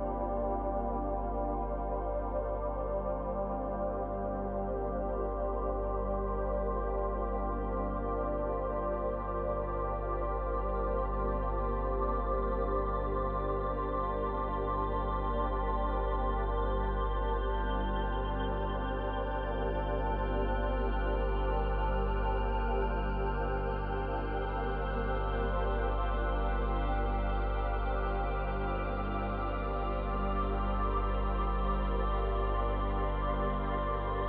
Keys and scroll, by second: 4.1 space, 5.2 ctrl+z, 33.3 ctrl+z.